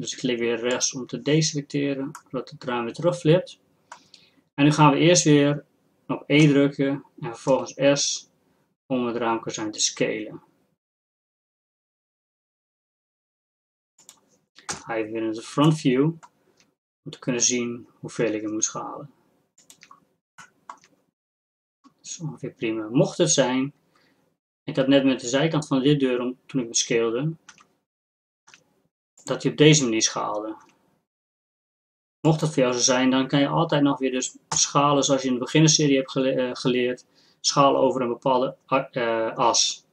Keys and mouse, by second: 2.2-6.4 drag, 6.4 e, 14.8 KP_1, 16.2-17.9 drag, 18.2 s, 21.7-27.5 drag, 27.5 s, 30.9 s, 34.5 s.